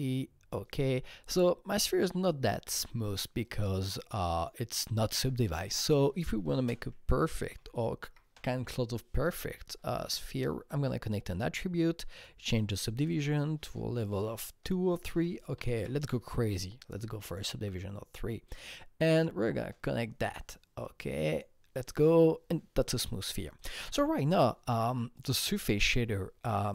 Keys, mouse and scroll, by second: 1.2-8.0 drag, 6.5 ctrl+space, 6.8-8.1 typing, 8.3 Return, 9.4-12.1 drag, 12.1 click, 13.0-14.0 drag, 14.0 KP_2, 15.5 BackSpace, 15.7 KP_3, 17.3 click, 23.6 click, 25.1 click, 26.6 click.